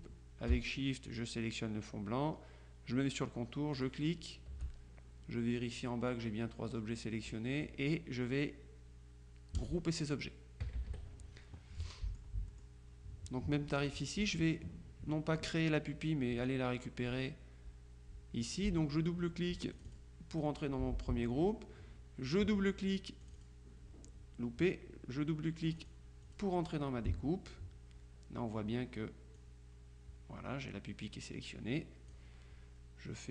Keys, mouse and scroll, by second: 1.2 shift+click, 3.8 click, 9.6 click, 10.7 KP_Subtract, 12.0-13.2 drag, 16.5 click, 19.8 click, 23.3 click, 25.8 click, 29.4-32.7 drag.